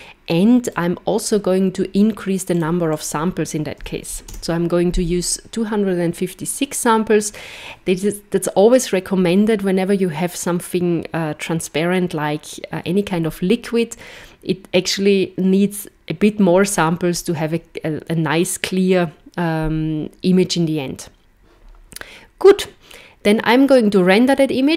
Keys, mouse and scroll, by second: 0.6 click, 1.2 click, 2.5 click.